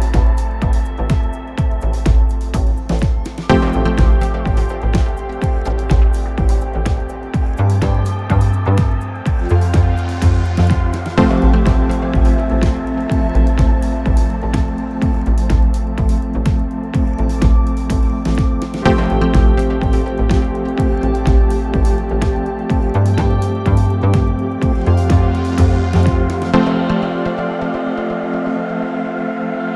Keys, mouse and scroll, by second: 5.0 click, 5.8-6.4 scroll up 1, 6.4 click, 7.8-12.1 drag, 13.1-15.2 drag, 15.8 click, 16.9-18.2 drag, 19.0 click, 20.1-23.2 drag, 23.7 click, 25.7 a, 26.3-29.4 right drag.